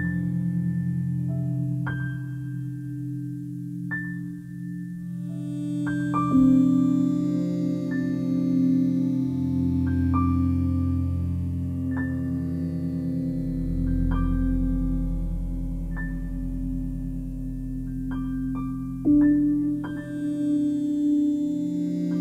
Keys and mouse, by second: 0.5 7, 1.7 typing, 4.4 click, 5.1 s, 6.7 click, 7.1-8.8 alt+drag, 9.5 alt+click, 10.3-12.2 alt+drag, 12.6-14.3 alt+drag, 14.8 alt+click, 15.5 ctrl+alt+click, 16.1-21.3 ctrl+alt+drag.